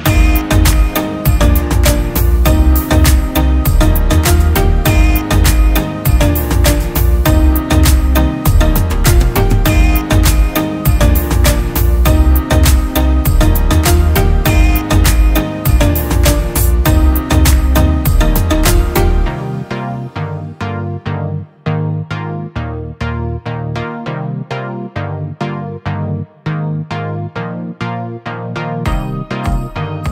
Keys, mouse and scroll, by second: 3.7 ctrl+t, 4.5 alt+shift+click, 5.9 Return, 27.3-28.5 typing.